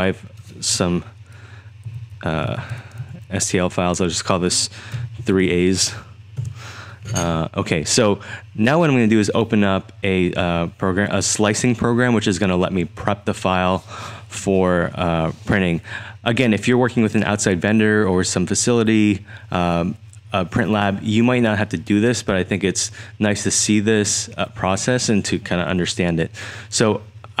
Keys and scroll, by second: 1.9-3.5 typing, 4.7-5.9 typing, 6.4 Return.